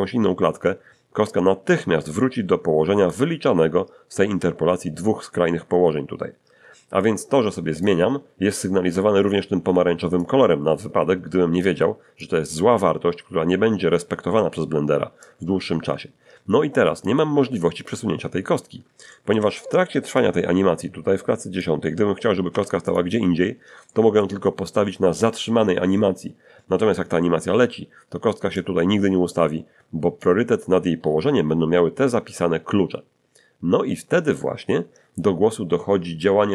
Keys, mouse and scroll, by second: 7.5 click, 10.2-12.4 drag, 15.2-17.2 drag, 18.4 scroll down 1, 19.1 shift+middle click, 20.2-21.8 drag, 22.5 g, 22.9 click, 23.9 shift+middle click, 28.6-30.4 drag.